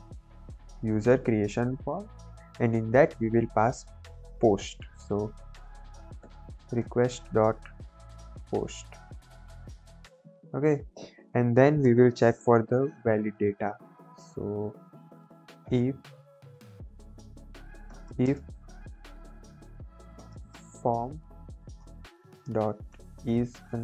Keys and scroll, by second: 0.0-2.4 typing, 0.9 Down, 1.1 Return, 4.9-9.4 typing, 9.9 Right, 11.8 Return, 14.1 Caps_Lock, 15.3-18.5 typing, 16.5 Caps_Lock, 19.6-20.9 typing, 21.4 Down, 21.7 Return, 22.1-23.5 typing.